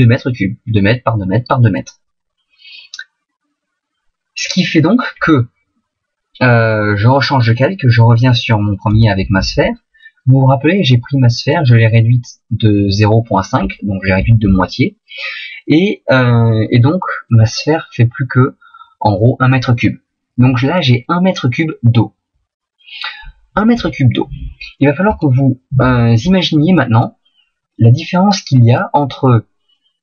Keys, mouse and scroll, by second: 8.8 click, 25.1 right click.